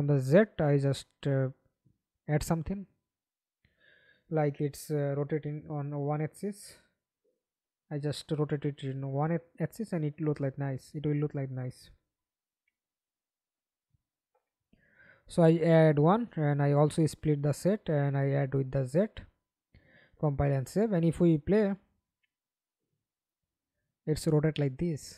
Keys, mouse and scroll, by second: 3.1 alt+click, 7.1-8.7 scroll up 1, 8.7-9.3 scroll up 1, 10.6 Return, 13.0 1, 13.2 Return, 15.2 right click, 20.8 middle click, 21.8 F11, 22.2 alt+p, 23.6-25.1 typing.